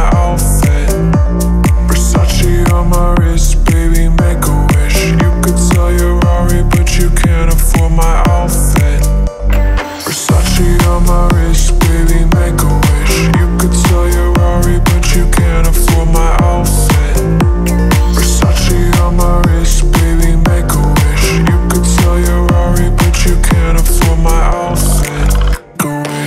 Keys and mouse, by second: 0.9 right click, 1.1 right click, 1.2 middle click, 3.0 middle drag, 3.9 middle click, 4.2 middle click, 4.4 middle click, 4.6 click, 4.8 middle click, 4.9 click, 5.0 middle click, 5.1 drag, 5.6 click, 6.4 click, 6.8 click, 7.1 middle click, 8.1 click, 8.4 middle click, 9.2 middle click, 9.8 middle click, 11.8 middle click, 12.3 middle click, 14.0 click, 14.8 click, 15.0 drag, 15.5 click, 15.7 click, 15.9 middle click, 16.1 click, 16.9 middle click, 18.1 middle click, 18.3 middle click, 18.8 middle click, 19.1 middle click, 19.3 middle drag, 20.3 middle click, 21.0 ctrl+s, 21.6 click, 21.7 middle click, 22.3 middle drag, 22.8 ctrl+s.